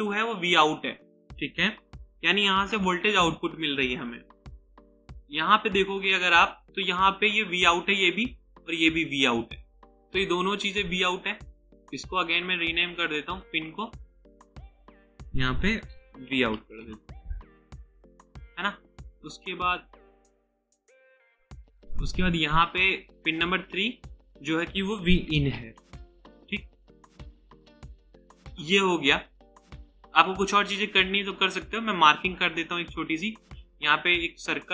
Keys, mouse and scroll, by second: 1.7-3.2 typing, 11.6 double click, 15.9-17.3 typing, 19.9 double click, 25.1-26.2 typing, 32.9 right click.